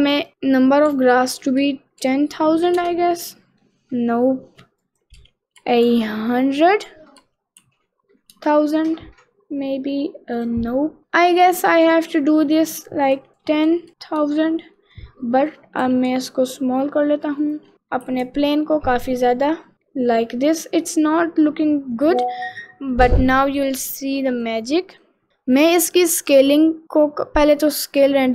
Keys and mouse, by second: 0.2-2.8 drag, 1.6 0, 3.4 middle click, 4.9-8.6 drag, 5.9 0, 7.2 0, 9.1-10.1 middle drag, 10.3 0, 10.5 click, 10.9 middle click, 13.0-14.3 drag, 13.7 0, 13.9 0, 14.8 middle click, 15.5 click, 15.8 s, 17.7 middle click, 18.1 s, 19.7 middle click, 21.7 middle click, 24.8 middle click.